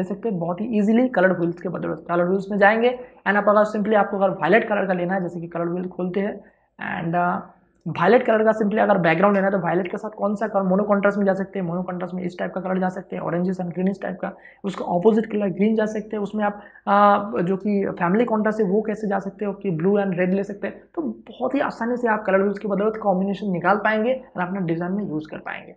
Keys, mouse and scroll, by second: 0.6 click, 1.2 ctrl+o, 2.5 click, 8.2 space, 8.4 ctrl+click.